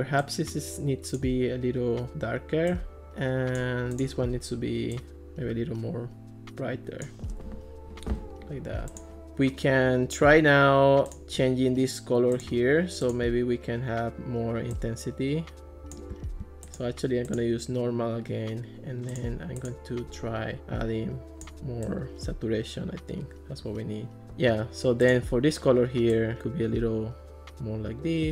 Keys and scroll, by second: 24.2 super+z.